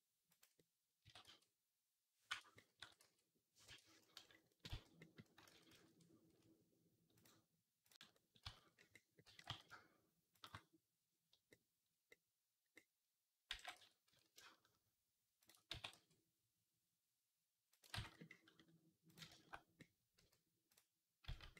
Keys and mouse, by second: 0.9 s, 2.6 s, 4.5 z, 5.3 ctrl+z, 5.6 ctrl+z, 7.0 click, 7.7-8.8 middle drag, 8.3 z, 9.1-10.3 middle drag, 9.1 g, 10.3 click, 10.9-12.6 drag, 12.6-16.3 middle drag, 13.3 g, 15.6 s, 16.3-21.2 drag, 17.8 ctrl+z, 20.0 z, 21.1 z, 21.2 middle click.